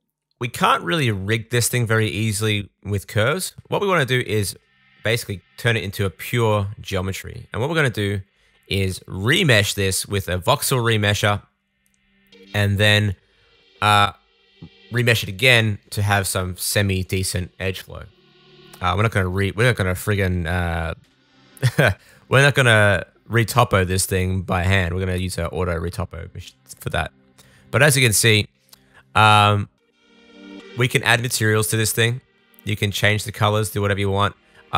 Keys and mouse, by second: 0.2 Tab, 0.9 Tab, 1.4-5.9 drag, 11.3-12.8 drag, 12.9 click, 16.2 super+s, 20.5-26.7 shift+middle drag, 26.7-29.5 drag, 29.5 middle click, 29.6-31.0 drag, 31.0 middle click, 31.1 click, 31.8 middle click, 32.0-34.7 drag.